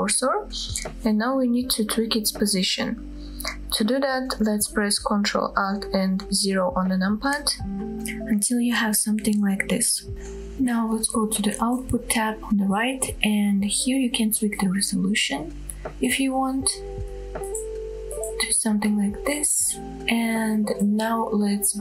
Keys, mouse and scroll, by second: 0.0-0.7 middle drag, 2.9-3.3 scroll down 1, 3.3 middle click, 6.3 ctrl+alt+KP_0, 12.0 click, 13.1-18.3 drag.